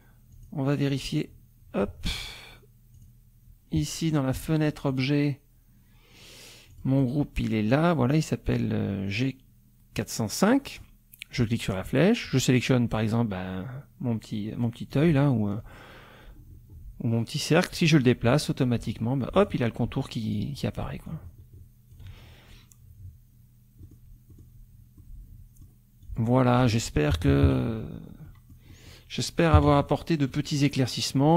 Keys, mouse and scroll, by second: 0.3 click, 0.9 click, 3.0 click, 4.9 click, 6.7 click, 11.4 click, 12.2 click, 14.9-18.5 drag, 19.3 click, 20.3 click, 21.1-22.1 ctrl+drag, 23.8 middle click, 24.3 click, 25.0 click, 26.0 click, 27.1 KP_Subtract, 28.3 click, 29.6 KP_Subtract, 30.3 click.